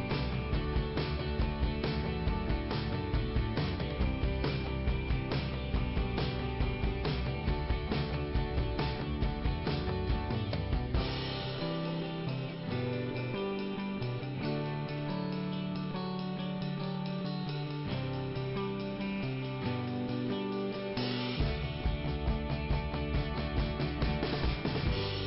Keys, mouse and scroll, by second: 2.5 click, 4.9 click, 7.8 click, 7.8 click, 8.9 middle click, 9.5-10.0 scroll down 1, 12.0 click, 14.7 click, 17.6 click, 17.9 click, 18.1 click, 18.4 click, 18.8 click, 19.1 click, 19.5 right click, 19.6 double right click, 20.2 scroll up 2, 21.0 click, 23.2 click, 23.6 click, 25.0 click.